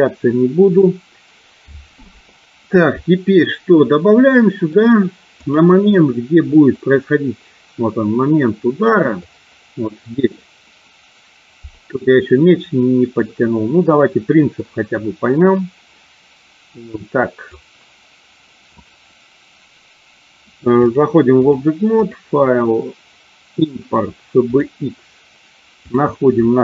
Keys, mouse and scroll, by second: 3.6-4.8 middle drag, 5.4 click, 6.6-8.9 drag, 9.3-10.4 middle drag, 13.3-14.5 middle drag, 16.7 click, 20.7 click, 21.9-24.9 drag.